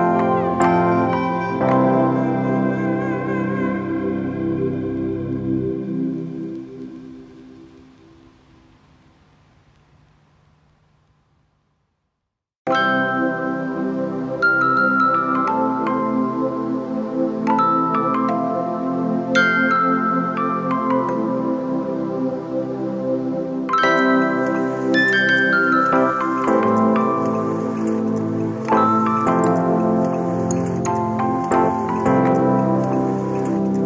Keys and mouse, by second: 10.2-17.2 shift+drag, 22.5 shift+Left, 23.1 shift+Up, 24.4 shift+Left, 30.7 shift+click, 31.4 shift+click.